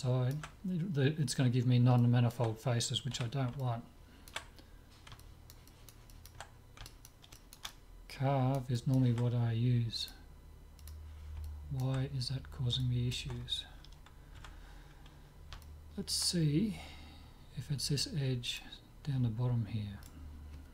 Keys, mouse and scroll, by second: 0.0-3.2 middle drag, 3.2 z, 10.1-11.8 drag, 10.1 middle click, 11.5-14.8 middle drag, 14.4 Tab, 15.7-17.4 middle drag, 18.5-20.3 drag, 20.1-20.7 right drag.